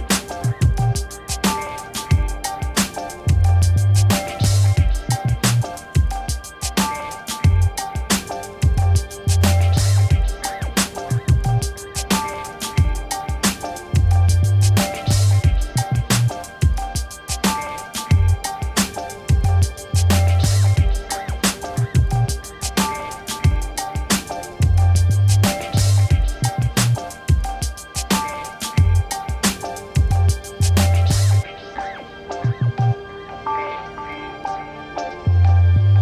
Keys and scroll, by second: 3.8 4, 4.0 0, 4.3 Return, 17.4-21.1 typing, 21.9 Return, 25.1 v, 28.4 ctrl+d, 29.1 v, 31.7 t, 33.8-35.2 typing.